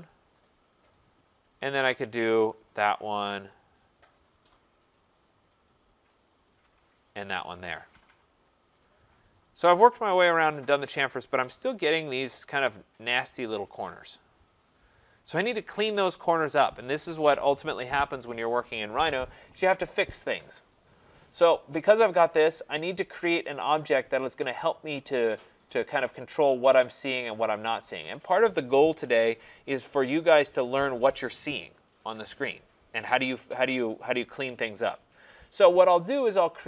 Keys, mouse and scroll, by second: 0.3-0.6 scroll, 1.2 right click, 1.6-2.2 scroll, 2.2 right click, 2.5 click, 3.0 click, 4.5 right click, 4.7-5.3 scroll, 5.8 right click, 6.3 click, 6.7 click, 7.9 middle click, 9.1 right click, 9.3 middle click, 9.4 middle click, 11.0 middle click, 11.1 middle click, 11.4 middle click, 11.6 scroll, 12.2 scroll, 35.3 right click.